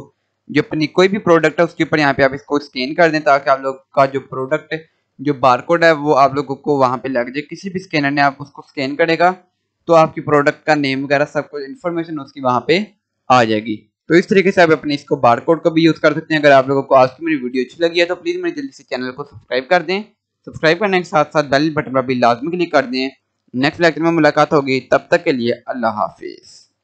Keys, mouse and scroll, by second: 0.9 scroll up 1, 2.1-2.8 scroll down 1, 2.8 scroll up 1.